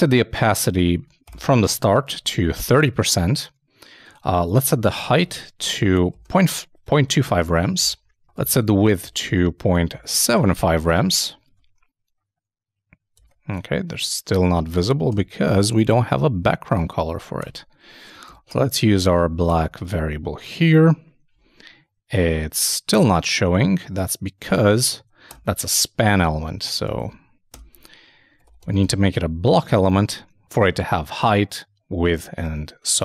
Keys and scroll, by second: 0.8 alt+shift+Right, 1.2 shift+., 5.3-6.2 typing, 8.6-9.5 typing, 11.2 super+;, 11.3 super+s, 11.4 super+Tab, 13.2 super+Tab, 19.6 super+Return, 19.6 super+s, 19.8 super+Tab, 23.7 super+Tab, 29.2 super+k, 29.5 super+s, 29.7 super+Tab.